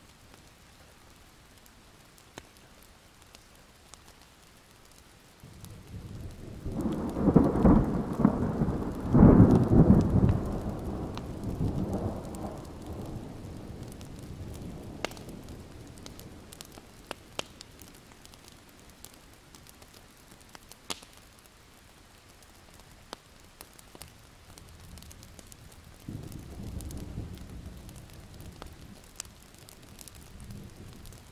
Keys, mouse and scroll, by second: 5.9 Escape, 6.6 click, 7.5 Escape, 8.2 click, 9.1 Escape, 9.8 click, 11.2 Escape, 11.9 click, 13.8 click, 14.7 right click, 15.5 click, 18.3-19.2 alt+scroll down 2, 19.2 click, 19.6 ctrl+z, 19.9 click, 20.7-21.2 scroll up 1, 23.7 click, 24.4 shift+click, 25.8 shift+click, 27.1-27.7 scroll down 2, 27.7 click, 27.8 scroll up 1, 28.0 click, 30.6 click, 31.2 alt+scroll up 1.